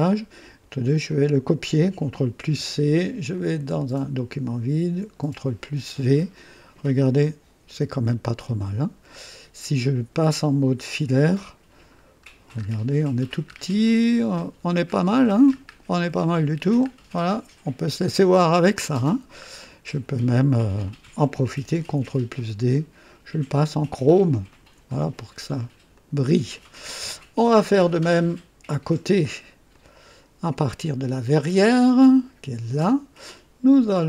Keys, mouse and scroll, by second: 1.0 click, 2.4 ctrl+c, 3.3 ctrl+click, 4.7 ctrl+v, 6.3-7.7 drag, 8.0 right click, 9.1 scroll up 1, 11.1 &, 11.8-12.7 scroll up 2, 13.4 scroll up 1, 14.0 &, 14.8-15.2 scroll down 1, 15.4 scroll up 1, 15.6-16.8 scroll down 3, 16.0 typing, 17.1 click, 17.7 right click, 18.0-18.4 scroll down 1, 18.7-19.5 drag, 20.7 click, 21.8 ctrl+d, 22.7 ctrl+click, 23.9 click, 24.4 click, 25.8 click, 26.5 click, 29.6 click, 31.2 click, 33.9 click.